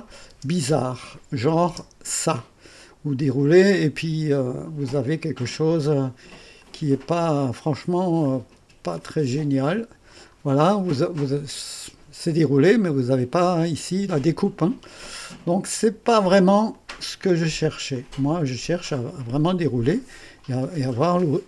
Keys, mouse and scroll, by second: 0.0 click, 0.3 space, 1.3 click, 1.7 space, 3.7 click, 6.6 click, 8.2 click, 8.4-9.1 typing, 9.0 click, 10.5-10.8 scroll down 1, 10.9-13.0 drag, 16.7 click, 17.2 space, 18.0 click, 18.5 space, 18.6 click.